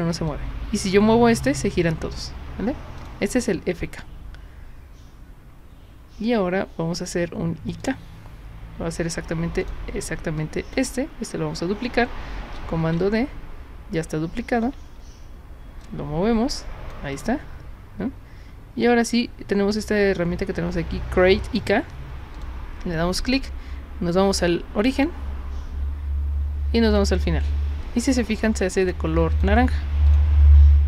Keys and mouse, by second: 0.3-1.6 drag, 3.0 click, 7.8 click, 9.7 click, 10.4-10.7 drag, 12.8 ctrl+d, 14.7 w, 15.8-16.9 drag, 17.2 click, 22.4 click, 25.0 click, 26.9 click, 28.8 click, 29.3 drag, 30.1 click.